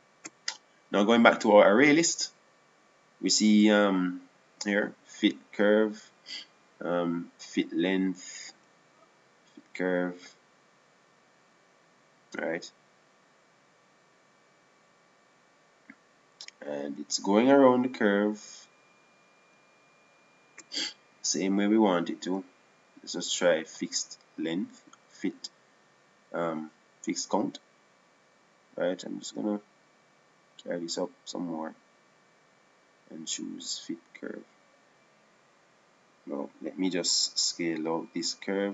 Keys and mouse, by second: 1.5-3.2 drag, 3.8-5.1 drag, 6.9-8.3 drag, 10.1-12.7 drag, 19.1 click, 21.2-23.0 middle drag, 23.8-25.7 drag, 26.6-30.0 drag, 30.8-37.2 drag.